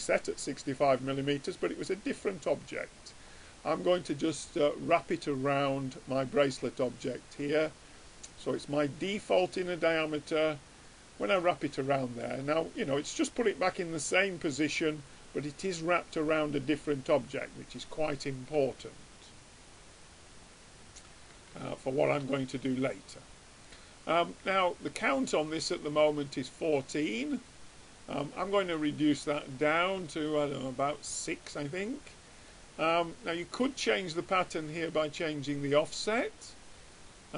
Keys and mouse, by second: 0.0-1.6 drag, 11.5-13.5 middle drag, 14.4-16.2 drag, 17.6-20.1 middle drag, 20.6-22.6 drag, 21.7 right click, 22.6-25.2 middle drag, 25.8-27.2 drag, 27.5-32.3 drag, 31.6 right click, 32.3 middle click, 34.3-36.4 middle drag, 35.4-37.3 drag, 35.4-36.4 right drag.